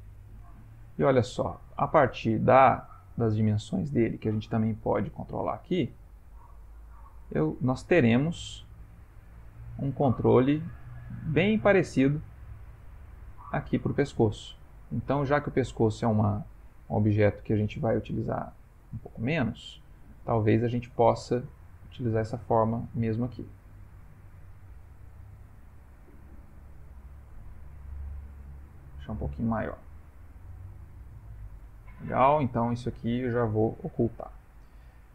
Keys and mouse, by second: 1.0 middle click, 1.4 middle click, 1.5 middle click, 1.7 ctrl+middle click, 2.7 ctrl+middle click, 3.0 shift+middle click, 3.3 ctrl+middle click, 3.6 ctrl+middle click, 4.9 click, 5.1 click, 5.4 click, 5.8 click, 6.0 click, 8.2 click, 8.2 middle click, 9.2 middle click, 9.8 middle click, 10.1 middle click, 12.8 click, 14.1 middle click, 15.3 shift+middle click, 16.1 ctrl+middle click, 16.2 ctrl+middle click, 17.9 ctrl+middle click, 18.5 middle click, 21.2 middle click, 23.7-24.1 ctrl+middle click, 24.6 ctrl+middle click, 25.4 middle click, 28.7 click, 30.0 middle click, 30.8 ctrl+middle click, 32.5 click, 34.2 h, 34.8 ctrl+middle click.